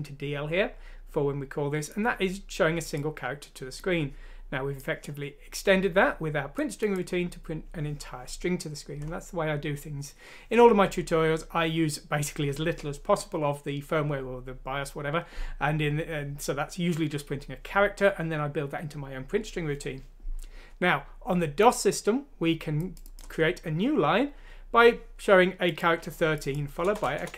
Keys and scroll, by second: 26.8 Return, 27.0 Return, 27.2 Return.